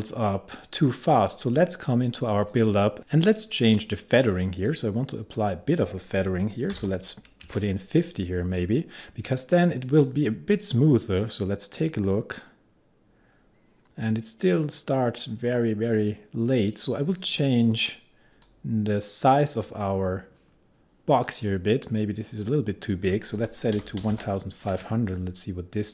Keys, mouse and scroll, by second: 6.8 5, 8.9-9.6 typing, 10.8-22.5 drag, 23.2-24.7 typing.